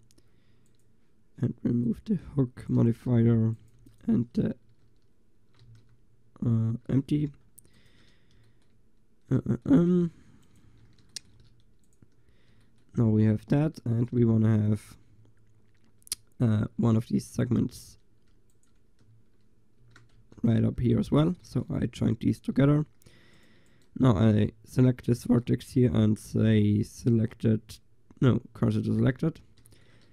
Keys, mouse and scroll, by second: 1.9-2.7 drag, 2.8-3.8 drag, 3.8 Delete, 5.7 ctrl+z, 7.7 Delete, 10.0 Tab, 10.7 Tab, 11.4 a, 16.8 Tab, 19.8 ctrl+j, 20.2 Tab, 20.8 a, 25.2 shift+s.